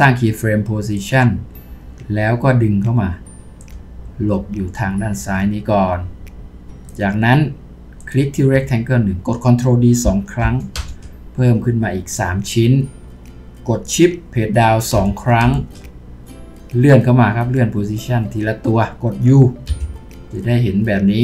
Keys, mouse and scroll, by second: 14.9 Down, 15.4 Down, 16.3-17.6 scroll down 2.